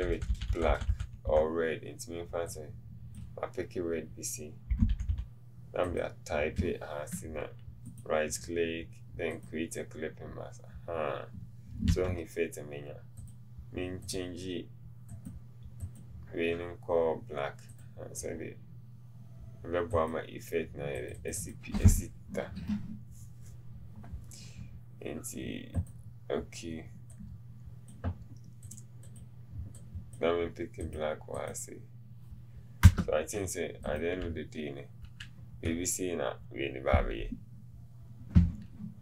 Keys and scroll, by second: 4.8 typing, 12.0 v, 33.0 Return.